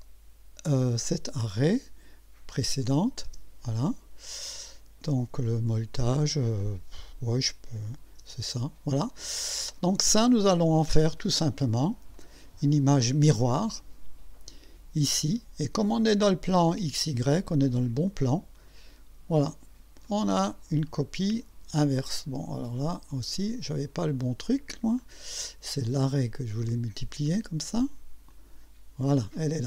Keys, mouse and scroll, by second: 2.8 click, 3.3 space, 7.9 click, 8.2 space, 9.3-10.2 drag, 12.2 click, 13.3 click, 15.1 click, 18.6 click, 20.1-22.2 drag, 23.1 click, 25.0 click, 25.8 click, 27.3 click, 28.3 click.